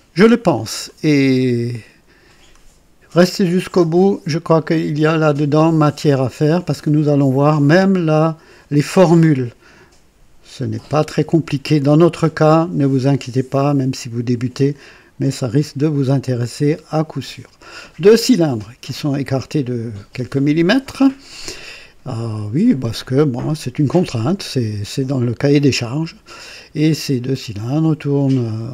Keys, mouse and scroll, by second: 4.9 click, 5.9 click, 6.7-7.9 drag, 18.8 click, 21.0-22.8 drag, 24.8-27.5 drag, 28.4 click.